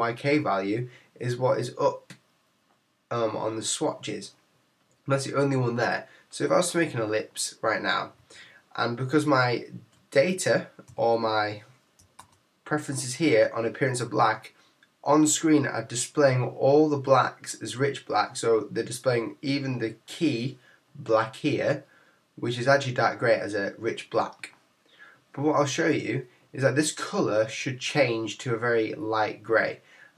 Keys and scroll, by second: 12.2 super+k.